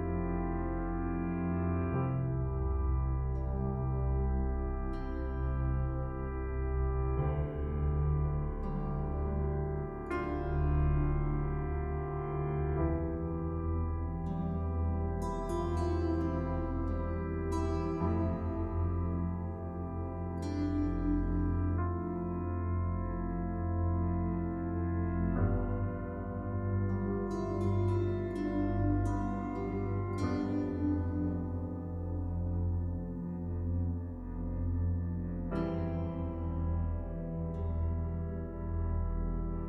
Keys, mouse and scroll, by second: 1.7 click, 14.3 click, 18.0-18.4 scroll down 1, 19.5 Delete, 20.4-20.7 scroll up 1, 21.7 right click, 23.7 click, 24.3-24.7 scroll down 1, 26.5 click, 29.8 right click, 31.0 click, 38.7 click.